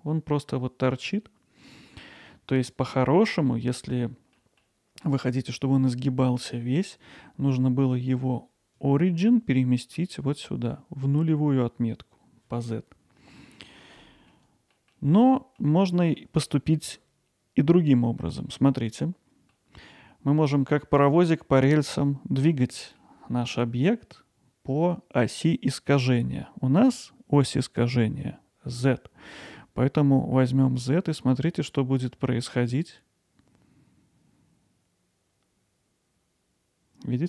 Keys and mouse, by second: 2.0-2.6 middle drag, 4.4 middle drag, 13.8-14.3 middle drag, 14.8 middle click, 15.8 alt+middle click, 19.5 middle click, 23.0-23.5 middle drag, 30.7-37.2 drag.